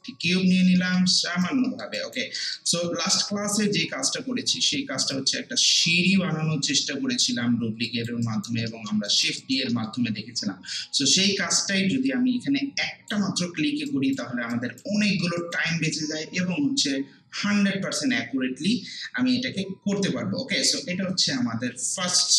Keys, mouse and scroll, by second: 0.3 scroll up 1, 0.8 alt+middle click, 1.2 alt+right click, 2.0 alt+right click, 2.4 alt+middle click, 3.2-4.7 typing, 5.1-7.5 drag, 7.5 scroll down 1, 7.8 click, 8.2 alt+right click, 8.7 alt+middle click, 9.1 alt+click, 9.7 alt+middle click, 10.8-13.4 alt+drag, 13.4 scroll down 1, 13.9 alt+right click, 15.0 alt+middle click, 15.4 alt+right click, 15.7 alt+middle click, 16.7 w, 21.3 ctrl+w, 22.0 ctrl+space.